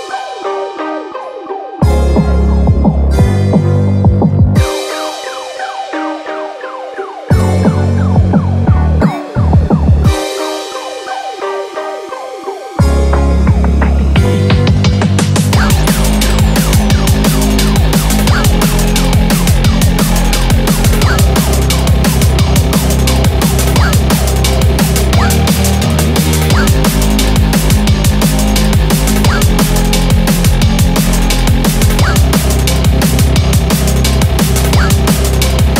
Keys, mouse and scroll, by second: 1.0 ctrl+alt+KP_0, 2.3 click, 3.0-4.4 scroll up 16, 4.8 click, 5.4 click, 8.1-10.2 scroll down 1, 11.2 click, 11.8 click, 15.2 g, 29.5-31.2 typing, 32.1 scroll down 10, 32.4 middle click, 34.3 scroll up 6, 34.5 middle click, 34.8 scroll down 4, 35.2 middle click.